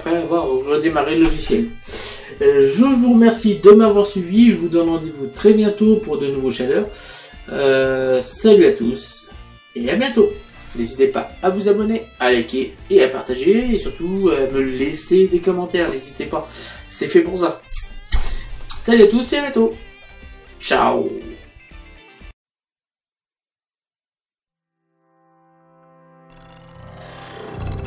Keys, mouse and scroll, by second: 22.3 click.